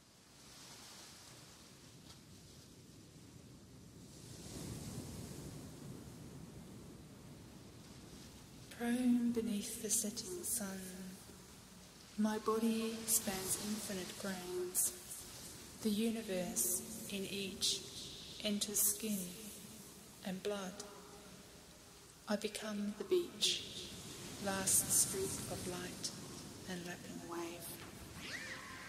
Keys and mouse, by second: 1.2 g, 1.8 g, 2.8 middle click, 3.8-5.4 drag, 5.5 Tab, 5.8 Tab, 6.6-7.7 drag, 7.1 shift+e, 7.5 Tab, 8.4 Tab, 9.4 click, 9.9-11.2 right drag, 11.5 Tab, 12.8 Tab, 14.1 shift+e, 14.4 Tab, 15.3 Tab, 16.7 Tab, 21.6 click, 22.3 Tab, 23.1 Tab, 26.7 Tab, 27.7 click, 28.5 right click.